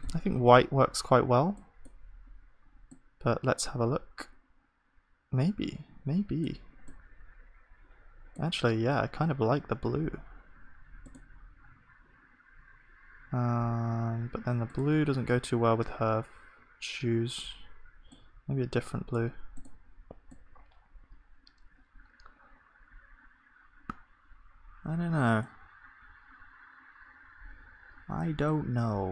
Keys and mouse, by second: 12.9-19.1 drag.